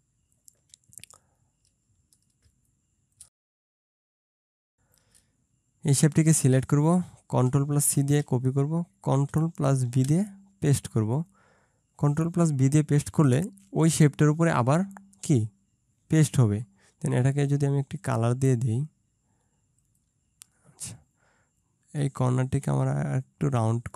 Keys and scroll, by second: 3.8 ctrl+shift+space, 8.0 ctrl+c, 9.9 ctrl+f.